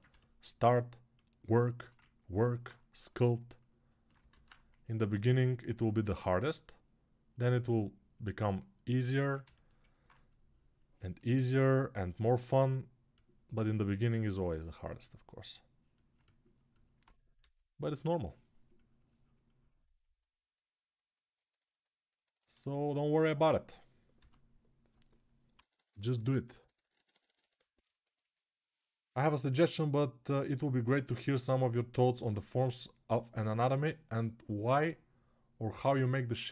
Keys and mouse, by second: 0.9-2.4 alt+shift+drag, 2.4 right click, 2.5-21.4 ctrl+drag, 4.2 alt+q, 17.1 s, 21.4-36.5 alt+right drag, 23.9 s, 25.3-26.7 ].